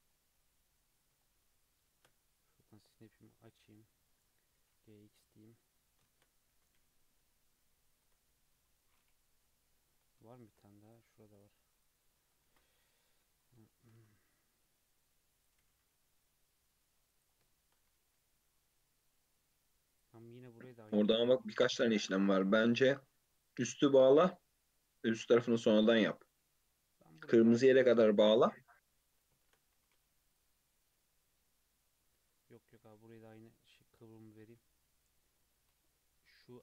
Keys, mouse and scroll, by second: 0.0 scroll down 3, 0.3-1.8 middle drag, 1.8 shift+Tab, 2.6-4.5 drag, 4.5 g, 6.0 shift+Tab, 6.5 e, 8.1 Tab, 8.4-9.4 middle drag, 9.4 KP_3, 9.9-10.3 scroll down 1, 10.3-10.8 shift+middle drag, 10.8 click, 11.3 click, 11.7 click, 12.0 Tab, 12.4 ctrl+r, 13.2 2, 13.4 click, 13.7 shift+middle click, 13.9 e, 15.5 g, 17.5 shift+middle click, 17.8 e, 21.0 scroll down 2, 21.2-23.5 middle drag, 23.5-23.8 scroll up 1, 25.8-28.2 shift+middle drag, 28.2 g, 29.5 shift+Tab, 29.7 g, 32.7 e, 34.0 Tab, 34.4 alt+z, 34.7-35.1 scroll down 3, 35.1-36.6 middle drag.